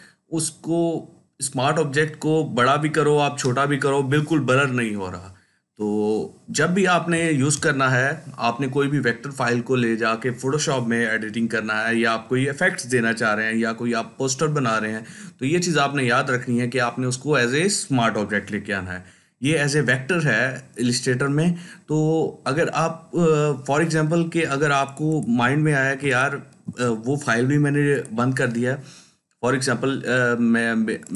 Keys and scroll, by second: 24.3 ctrl+space, 24.9-25.9 ctrl+space.